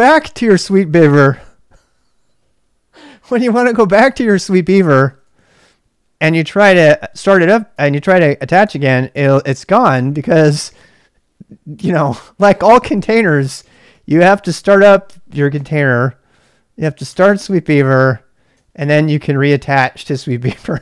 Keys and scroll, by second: 5.0 ctrl+[, 5.2 k, 6.2 k, 7.8 k, 8.6 Return, 13.7 ctrl+[, 13.9 k, 15.5 k, 17.0 Return, 18.5 ctrl+[, 18.7 k, 18.8 k, 19.5 Return.